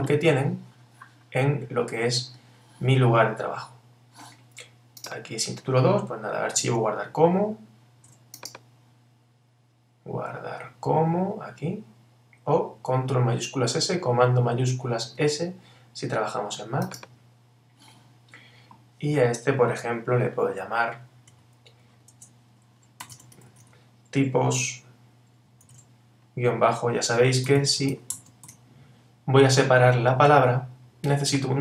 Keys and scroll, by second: 25.7 shift+-.